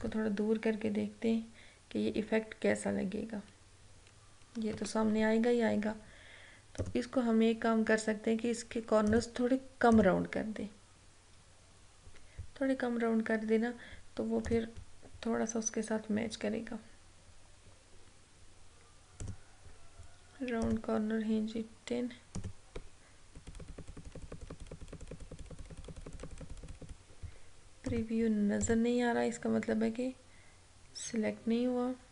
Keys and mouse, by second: 6.9 click, 9.2 click, 14.6 click, 19.3 click, 23.4 Down, 28.0 click.